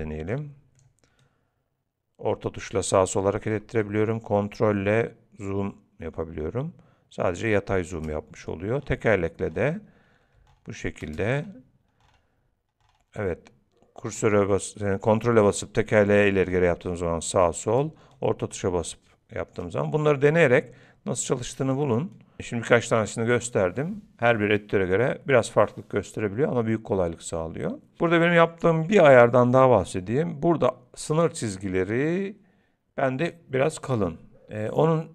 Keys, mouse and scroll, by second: 0.3 click, 1.2 middle click, 3.9 ctrl+middle click, 8.8-9.2 scroll up 5, 9.2 scroll down 5, 9.4-9.8 scroll up 3, 9.8 scroll down 1, 9.9-10.4 scroll down 1, 11.4 ctrl+scroll up 1, 11.6 ctrl+scroll down 1, 11.7-12.0 ctrl+scroll down 4, 12.0-12.3 ctrl+scroll up 2, 12.3 ctrl+scroll down 1, 12.5 ctrl+scroll down 1, 12.8-13.2 ctrl+scroll up 2, 13.2 ctrl+scroll down 1, 13.3-13.9 ctrl+scroll down 1, 14.0-14.8 ctrl+scroll up 2, 15.2-15.7 ctrl+scroll down 4, 15.4-15.7 ctrl+scroll up 2, 15.7 ctrl+scroll down 3, 16.1 ctrl+scroll up 2, 16.2 ctrl+scroll down 2, 16.4 ctrl+scroll up 1, 16.7 ctrl+scroll down 1, 16.8 ctrl+scroll down 1, 18.2 ctrl+middle click, 18.7 ctrl+scroll down 1, 21.8 click.